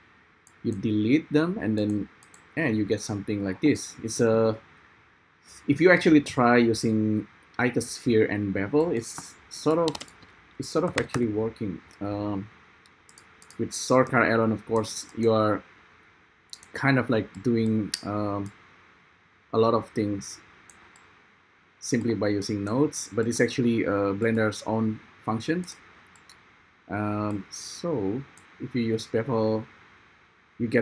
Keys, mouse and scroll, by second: 0.9 ctrl+i, 1.9 x, 2.3 i.